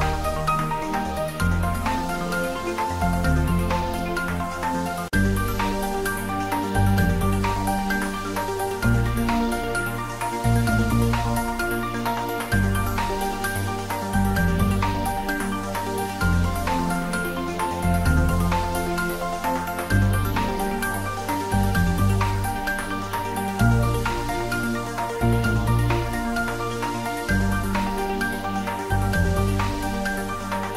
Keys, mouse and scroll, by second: 3.5 scroll up 1, 4.0-5.8 middle drag, 7.6-8.6 scroll up 1, 9.1-10.0 scroll down 1, 15.0-15.3 scroll down 1, 16.5 scroll down 1, 18.2-18.9 scroll up 1, 18.9-21.8 drag, 21.8 scroll up 1, 29.3 scroll down 1.